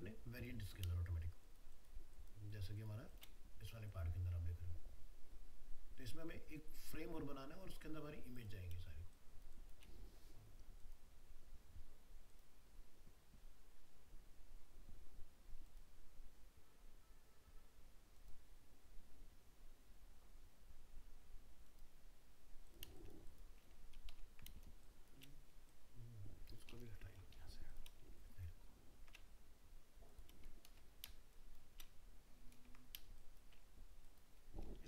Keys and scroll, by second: 24.1 ctrl+-, 28.7 ctrl+space.